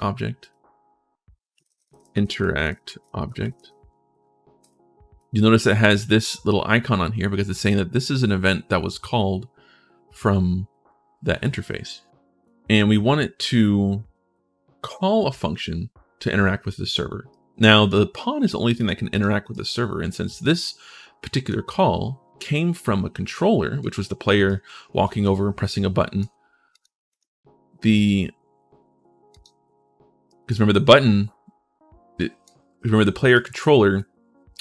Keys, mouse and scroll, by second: 0.2 right click, 1.1-3.2 typing, 4.4 click, 5.0 click, 12.2 right click, 17.1 right click, 18.5 click, 18.9 click, 19.3 right click, 20.2-21.2 drag, 24.2 click, 24.4 w, 26.5 click, 26.9 click, 27.7 right click, 29.1 right click, 30.1 right click, 31.9 right click, 33.1 right click.